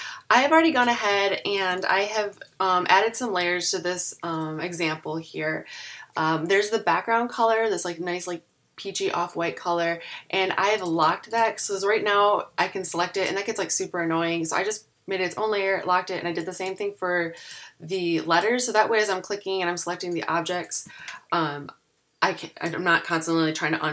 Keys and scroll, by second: 1.7 super+-, 2.5 v, 21.0 alt+super+2.